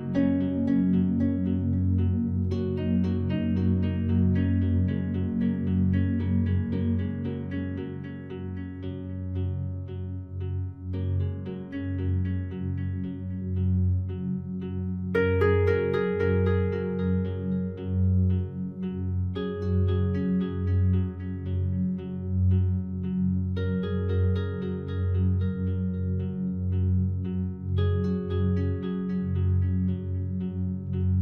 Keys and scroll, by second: 3.6 ctrl+t, 14.9 shift+F5.